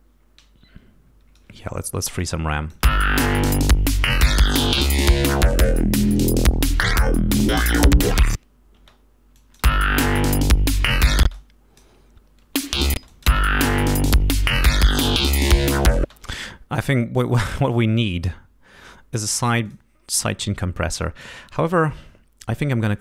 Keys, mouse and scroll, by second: 2.4 click, 2.7 space, 8.7 space, 9.4 click, 9.6 space, 11.2 space, 11.3 click, 12.4 space, 13.0 click, 13.9-14.2 scroll up 2, 14.6-14.9 scroll down 2, 15.5 scroll up 2, 16.0 space, 17.1 click, 18.0 right click, 19.6 click, 20.1-20.4 scroll up 2, 21.4-22.2 scroll down 6, 22.8 click.